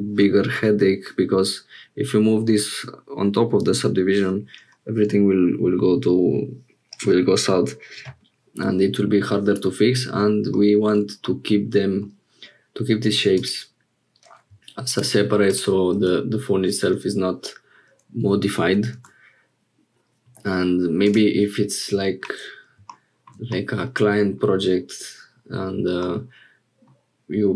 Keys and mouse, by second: 11.2 middle click, 13.3 click, 15.5 click, 16.1 Tab, 23.5 click, 26.0 middle click.